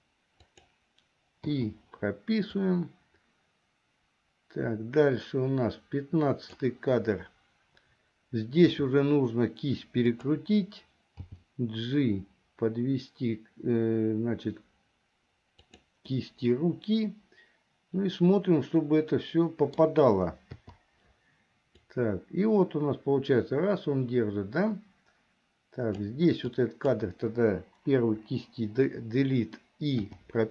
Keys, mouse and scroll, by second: 1.7 i, 2.8-6.8 drag, 8.8 r, 11.2 g, 16.2-20.0 middle drag, 20.8 i, 22.0-26.2 drag, 26.7 click, 28.2 Delete, 30.2 i.